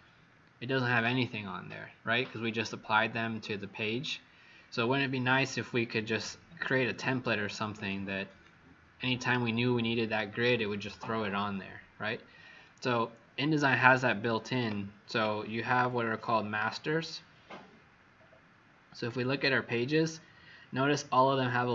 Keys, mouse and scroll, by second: 0.2-0.5 scroll down 2, 3.9-4.4 scroll up 4, 4.5-4.8 scroll up 5, 5.3 scroll up 1.